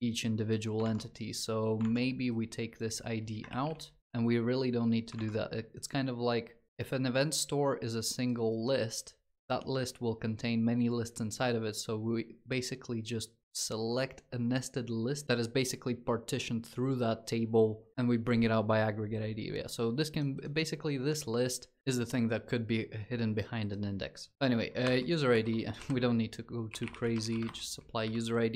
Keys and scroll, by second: 3.3 ctrl+s.